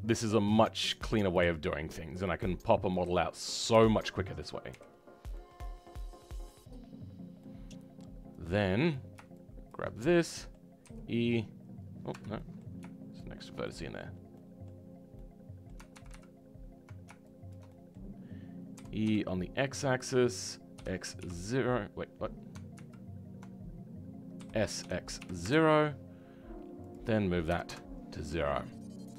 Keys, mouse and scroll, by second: 5.3-8.8 right drag, 5.3 middle click, 8.8 click, 10.2 right click, 10.8 e, 12.3-13.4 right drag, 12.3 middle click, 13.4 shift+click, 13.6-15.9 right drag, 13.6 middle click, 15.9 ctrl+z, 17.6-18.7 middle drag, 18.7 e, 28.2 middle click.